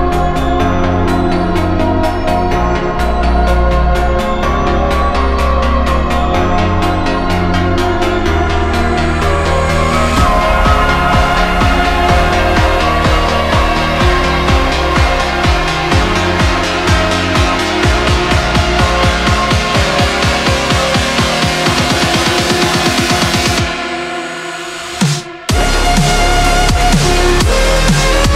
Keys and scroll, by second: 4.7 b, 5.0 ctrl+z, 7.5 ctrl+z, 8.9 scroll down 1, 9.7 ctrl+z, 10.4 ctrl+z, 11.1 ctrl+z.